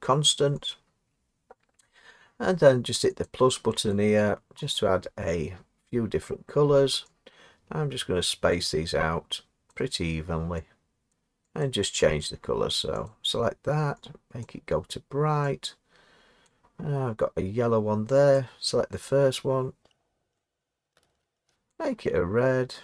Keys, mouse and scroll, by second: 3.9 click, 4.5-22.8 drag.